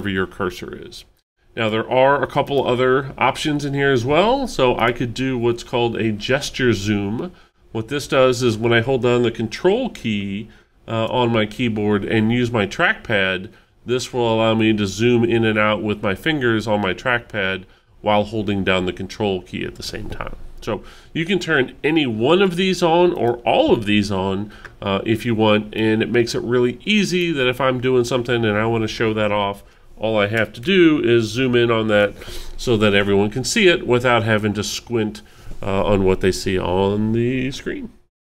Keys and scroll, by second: 30.6 alt+super+=.